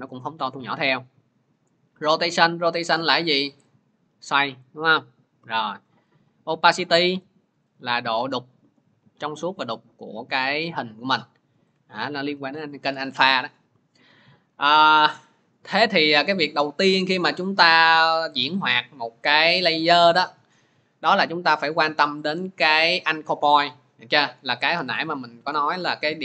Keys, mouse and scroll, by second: 1.6 click, 5.3 click, 5.5 ctrl+z, 11.5 click, 11.8 ctrl+z, 15.8 click, 24.9 click, 25.6-26.2 scroll.